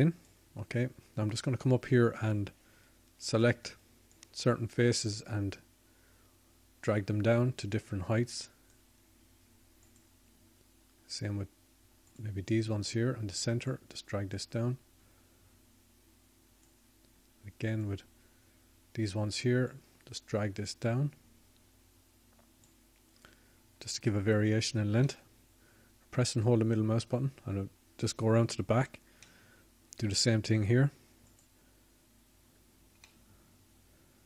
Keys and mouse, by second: 0.9 click, 1.5 KP_1, 7.2 middle click, 8.4-11.8 drag, 16.1-21.6 drag, 23.8-27.5 drag.